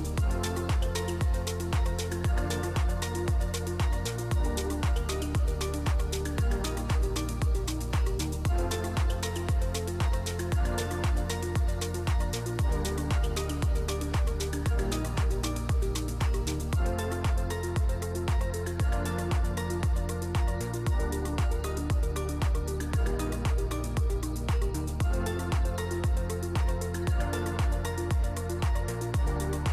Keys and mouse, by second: 2.9 click, 3.2 ctrl+r, 4.9 click, 5.3 ctrl+r, 7.8 /, 8.5 Tab, 8.9-9.4 drag, 9.8 click, 11.5 shift+click, 13.0-15.0 drag, 15.0 ctrl+2, 15.5-17.2 drag, 17.2-18.0 right drag, 18.0 middle click, 19.4-21.2 drag, 21.2 middle drag, 22.4-25.6 drag, 25.7 Tab, 26.3 3, 26.5 click, 29.0 click.